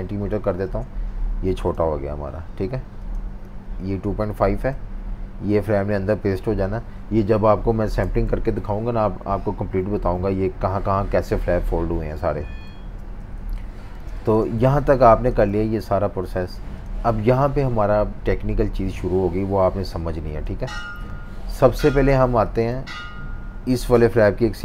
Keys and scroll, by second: 0.6 Return, 8.0 F18, 12.7 F19, 13.2 super+-, 13.4 super+-, 14.0 space, 14.6 z, 15.5 v, 20.5 typing, 21.7-22.9 typing.